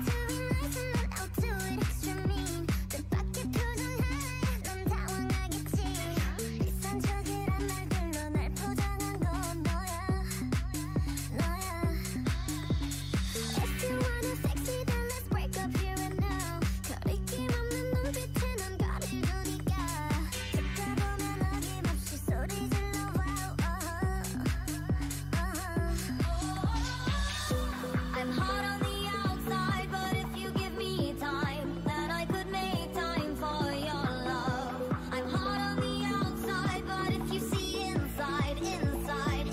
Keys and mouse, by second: 0.3 click, 0.5 w, 1.0 Tab, 1.9 Tab, 2.5 w, 2.9 Tab, 4.6 Tab, 5.1 a, 5.4 c, 6.1 click, 6.4 w, 6.9 w, 7.4 click, 7.7 a, 7.9 c, 8.6 click, 9.0 w, 9.2 w, 9.6 Tab, 10.6 Tab, 11.2 a, 11.3 c, 12.6 w, 12.9 w, 13.6 Tab, 14.7 Tab, 15.0 w, 15.6 Tab, 16.6 Tab, 17.9 a, 17.9 c, 18.2 a, 19.8-21.2 drag, 19.8 w, 20.0 w, 21.5 a, 21.5 c, 22.8 w, 23.0 w, 23.5 Tab, 24.5 Tab, 25.4 w, 25.6 w, 26.1 Tab, 28.9 Tab, 31.8-35.2 typing, 35.1 Tab, 36.3 Tab, 37.0 w, 37.6 Tab, 39.0 Tab.